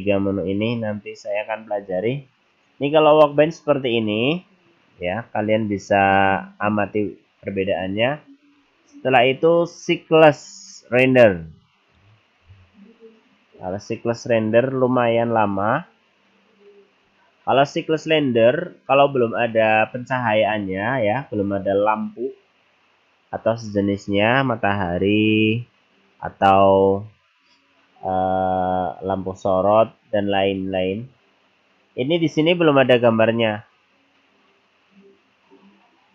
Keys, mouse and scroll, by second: 8.5 click, 11.1 click.